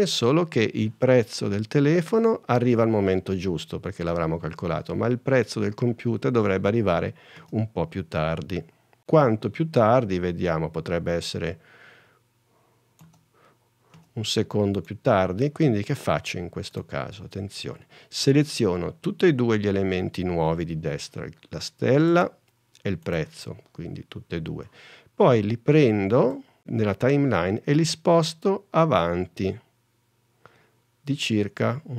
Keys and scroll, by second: 7.5 space, 8.3 super+space, 9.5 super+Tab, 12.4 space, 13.8 space.